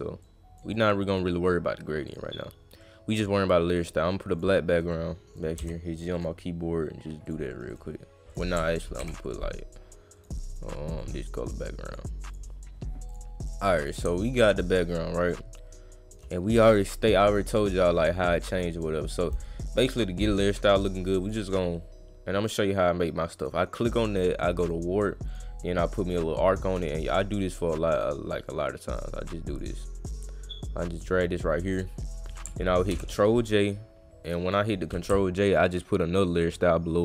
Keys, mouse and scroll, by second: 0.2 click, 0.7 click, 2.1 click, 2.8 click, 4.3 click, 4.9 click, 5.6 g, 6.1 click, 7.2 click, 7.7 click, 8.3 click, 10.2 click, 10.5 click, 10.8 click, 11.0 click, 11.9 click, 12.3 click, 13.1 click, 13.5 click, 14.7-16.1 shift+drag, 18.0 click, 21.2 click, 23.4 click, 24.6 click, 25.3 click, 27.0-27.9 drag, 28.0 click, 28.5 click, 29.3 click, 30.2 click, 31.7 click, 34.2 drag.